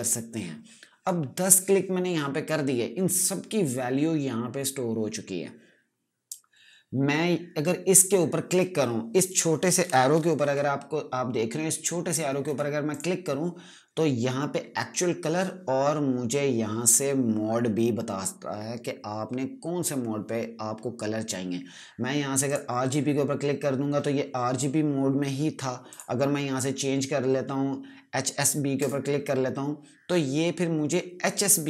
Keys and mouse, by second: 12.8 click, 22.4 click, 25.8 click, 28.7 click.